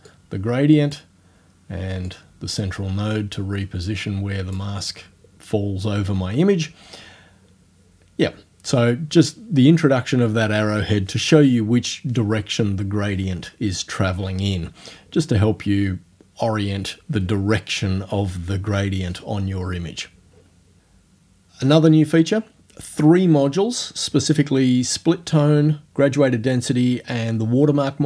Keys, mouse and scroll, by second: 0.1-1.1 drag, 2.1-4.8 drag.